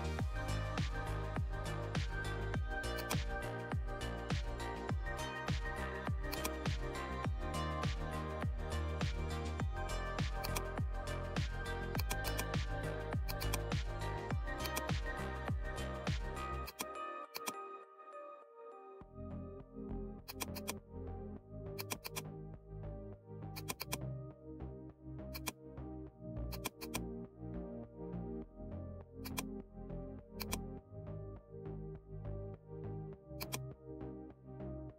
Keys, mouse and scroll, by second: 4.3 scroll down 1, 6.2-9.3 drag, 9.3-23.5 drag, 24.0-30.3 drag, 33.4-34.9 drag.